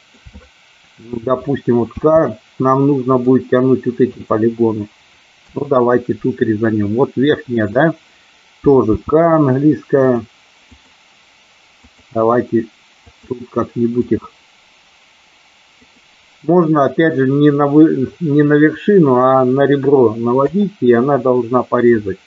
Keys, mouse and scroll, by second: 1.9 k, 8.9 k.